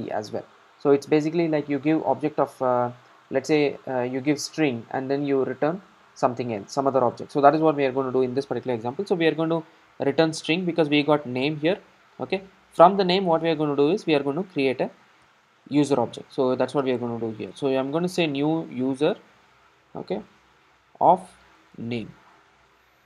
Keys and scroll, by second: 18.1 Return.